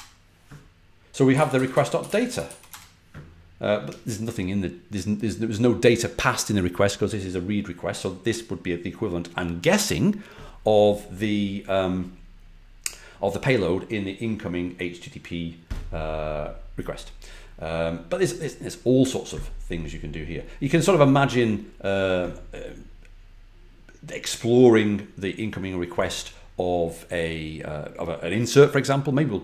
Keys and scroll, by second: 1.0-2.9 typing.